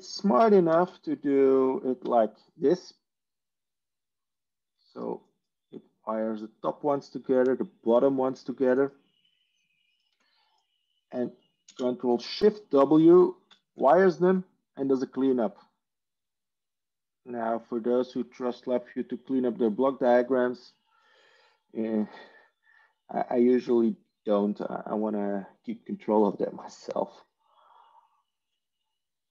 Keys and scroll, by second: 0.6 ctrl+space, 2.0 ctrl+w, 9.8 ctrl+z, 11.5 ctrl+space, 13.4 ctrl+shift+w.